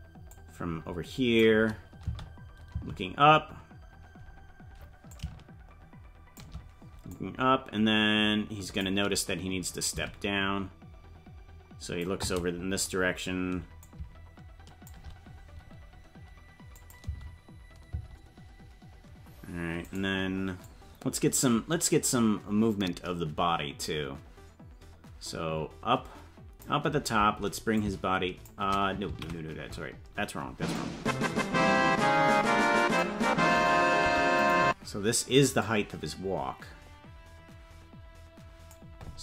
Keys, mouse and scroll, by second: 0.3-1.4 drag, 2.0 space, 5.1-6.4 shift+drag, 5.1 space, 7.1-8.8 drag, 9.9-12.1 shift+drag, 13.8-14.9 shift+drag, 16.7 click, 17.0 space, 20.0 right click, 20.0 space, 20.6-26.7 drag, 27.7 click, 29.6 ctrl+z, 30.7-33.0 drag, 34.0 i, 35.6-38.8 drag.